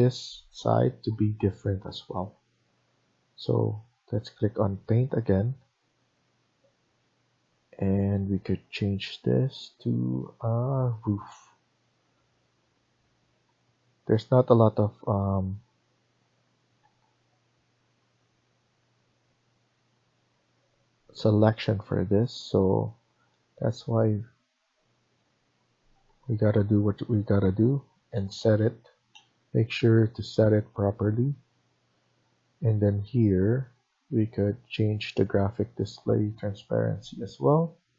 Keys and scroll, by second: 22.5 Escape, 26.3 ctrl+z.